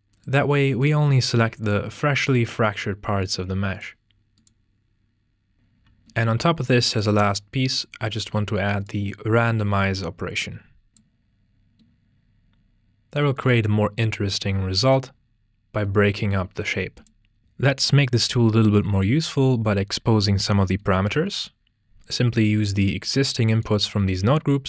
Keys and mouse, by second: 0.3-1.8 drag, 3.2-5.8 drag, 6.6-7.9 drag, 9.7 click, 9.9-11.8 drag, 16.6 click, 17.4 ctrl+space, 23.6 click.